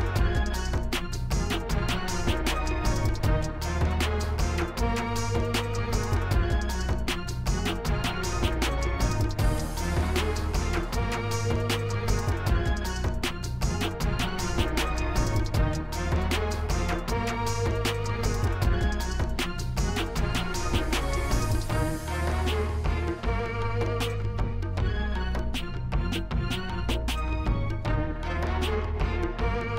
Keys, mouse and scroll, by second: 1.3 click, 2.8 click, 4.2 click, 4.7 click, 5.9 click, 6.4 right click, 7.1 click, 7.6 click, 8.4 o, 8.5 u, 8.8 t, 9.2 click, 9.6 click, 10.4 click, 20.7 click, 21.6 click, 23.3 click, 26.6 click, 27.9-28.4 drag.